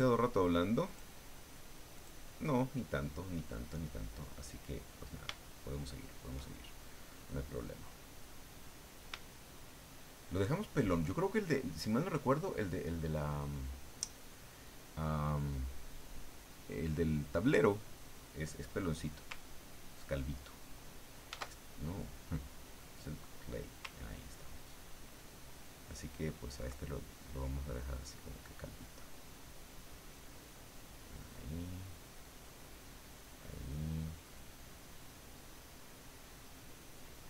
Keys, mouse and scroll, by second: 0.8 click, 1.9 click, 5.4-6.4 shift+middle drag, 9.3 shift+middle click, 10.3 shift+middle click, 19.7-21.3 ctrl+drag, 21.3 ctrl+z, 22.3 click, 23.1 click, 24.2-26.7 ctrl+drag, 27.7-30.6 drag, 31.0-35.9 drag, 36.2-37.2 drag.